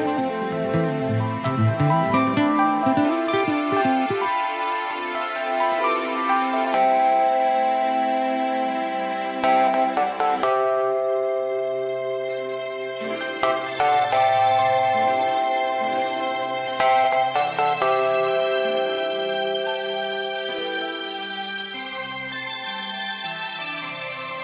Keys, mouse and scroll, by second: 10.1 click, 12.1 click, 17.7 click, 20.2 click, 22.0 click.